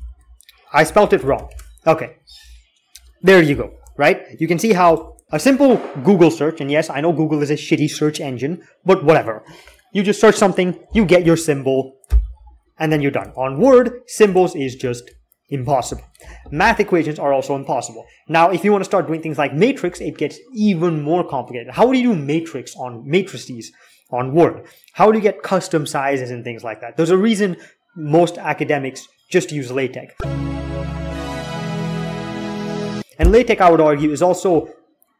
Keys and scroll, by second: 13.4 alt+x, 16.0 alt+x.